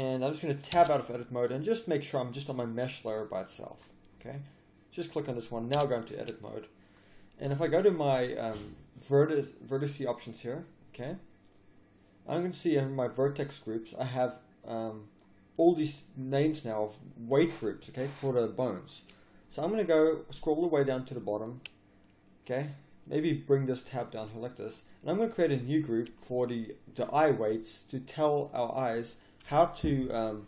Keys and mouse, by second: 0.7 Tab, 4.1-5.5 drag, 5.7 Tab, 6.0 click, 6.8 middle click, 9.2-11.0 drag, 23.2-27.0 drag, 27.7 click, 27.8 middle click, 27.9-30.4 drag.